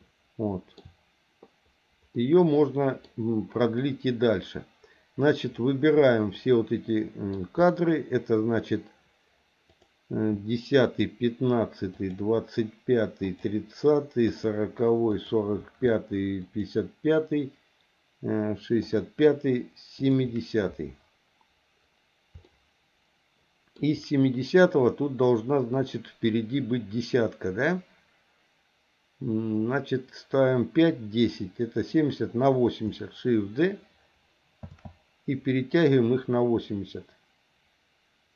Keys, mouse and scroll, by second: 2.1-3.1 middle drag, 6.3-7.3 middle drag, 9.7 click, 10.8 shift+click, 11.9 shift+click, 13.2 shift+click, 14.2 shift+click, 15.1 shift+click, 16.4 shift+click, 18.8 shift+click, 19.9 shift+click, 22.4-23.8 shift+middle drag, 34.7 shift+d.